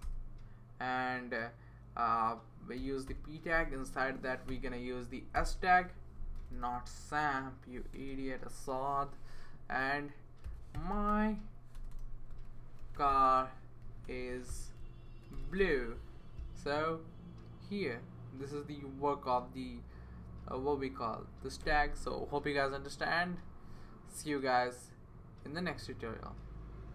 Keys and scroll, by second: 0.0 BackSpace, 2.8 p, 3.1 Return, 4.5 s, 5.3 Return, 6.3 BackSpace, 6.5 BackSpace, 6.7 BackSpace, 7.9 Tab, 10.2-16.1 typing.